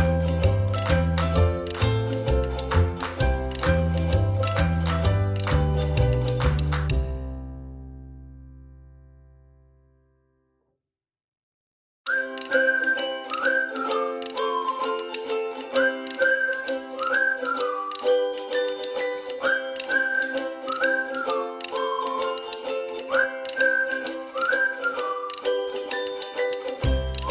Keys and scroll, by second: 9.7 Delete, 22.2 Delete.